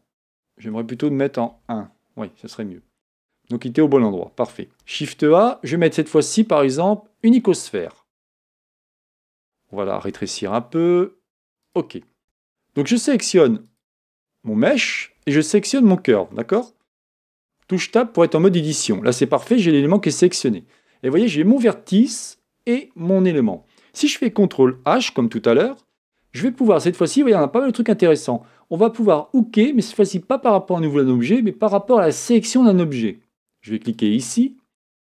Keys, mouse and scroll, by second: 1.5 KP_1, 4.8 shift+a, 10.0 s, 12.2 middle click, 12.2 a, 13.7 click, 15.7 shift+click, 16.3-17.5 middle drag, 17.5 Tab, 18.2-25.2 middle drag, 25.2 ctrl+h.